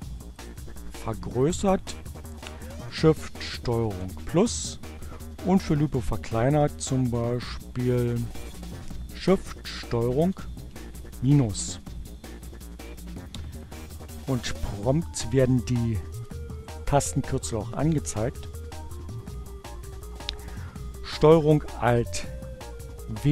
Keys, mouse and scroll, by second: 3.4 ctrl+shift+KP_Add, 6.1 click, 6.6-8.2 drag, 8.5 ctrl+shift+KP_Subtract, 13.3 click, 14.6 click, 15.9 click, 21.3 ctrl+alt+w.